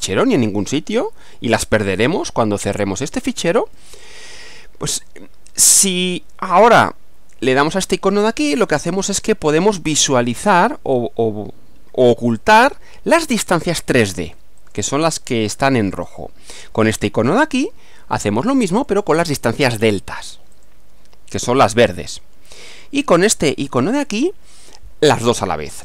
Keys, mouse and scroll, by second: 1.0-2.3 middle drag, 2.4-3.4 middle drag, 3.8 middle click, 8.9 click, 12.4 click, 14.6 click, 16.0 click, 18.8 click, 20.5 click, 22.1 click, 22.7 click.